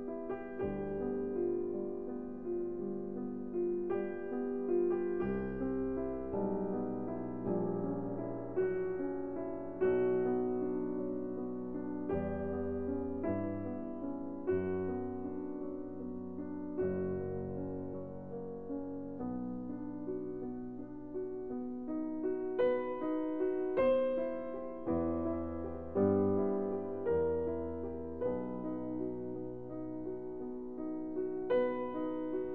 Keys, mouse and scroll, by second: 2.4 click, 3.0 middle click, 3.1 middle click, 4.0-4.7 scroll, 6.5 scroll, 7.0-7.3 scroll, 8.8 right click, 10.2 click, 11.8 scroll, 13.8-14.7 scroll, 19.1 click, 19.5-21.7 scroll, 22.6-22.9 scroll, 31.3 click, 32.4-32.5 scroll.